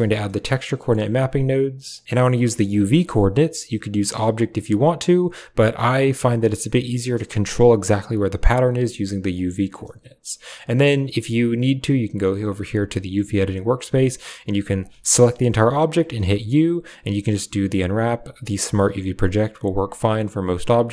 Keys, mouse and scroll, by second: 2.4 drag, 2.9-4.4 drag, 4.6-5.1 drag, 8.0-9.0 drag, 9.2 click, 14.9 a, 15.0 a, 16.0 u.